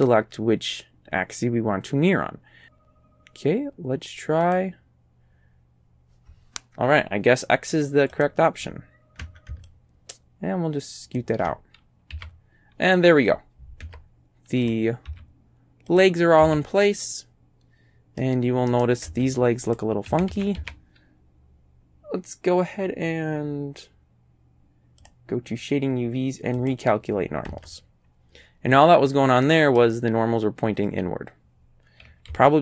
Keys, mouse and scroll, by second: 4.5 click, 8.2 click, 9.7-11.4 ctrl+drag, 12.1 a, 13.0 click, 13.9 Tab, 14.7 click, 15.1 z, 15.9 click, 16.5 a, 16.8-18.4 drag, 18.7 right click, 19.2 Tab, 19.7 click, 20.1 a, 20.4 a, 25.1 click, 26.6 click, 27.5 Tab, 28.8-29.4 scroll up 3, 29.5 middle click, 30.8-31.1 scroll down 1, 32.3 a.